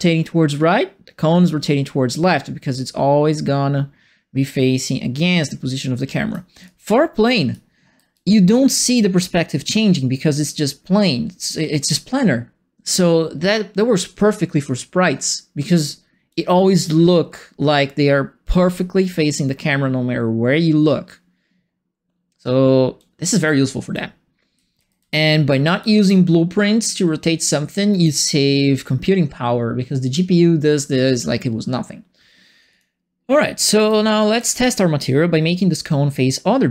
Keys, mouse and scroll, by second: 6.3-8.5 typing, 6.6-28.1 right drag, 16.2 s, 22.9-26.4 typing, 32.7 click, 33.5-34.8 typing, 33.6 right click.